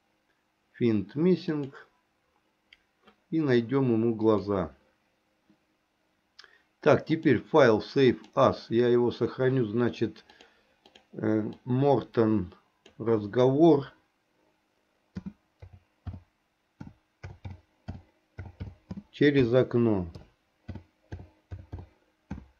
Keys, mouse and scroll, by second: 7.2-8.6 drag.